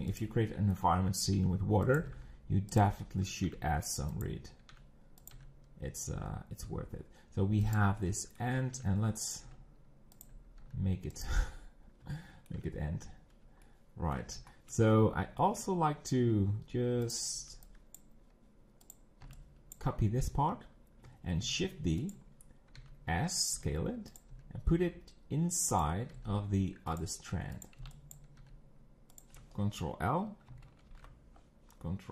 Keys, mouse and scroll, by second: 0.5 shift+middle click, 1.4 e, 2.0 g, 3.0 shift+middle click, 3.5 e, 4.7 e, 5.3 g, 8.0 shift+middle click, 8.7 e, 9.4 s, 10.7 g, 11.5 scroll down 5, 12.1-14.9 shift+middle drag, 14.9-16.6 scroll up 6, 15.4 shift+middle click, 16.6-17.1 scroll down 3, 17.1 click, 17.9 b, 18.9 click, 19.8 b, 21.4 shift+d, 22.3 scroll up 2, 22.8 s, 23.5 r, 24.3 g, 26.2 g, 27.7 click, 28.2 b, 28.4 g.